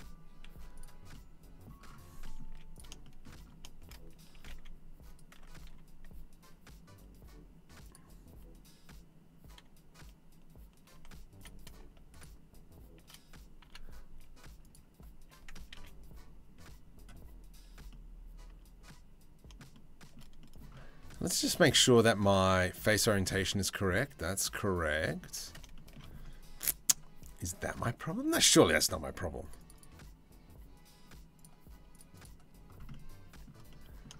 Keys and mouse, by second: 0.1 z, 2.1 z, 4.0 g, 5.2 2, 10.5 1, 13.3 m, 15.4 ctrl+z, 19.1 shift+middle click, 21.1-22.5 middle drag, 22.9-25.6 middle drag, 26.2 middle click, 29.1 click, 31.0 click, 31.6 middle click, 31.9 middle click, 33.1 middle click, 33.7 shift+middle click.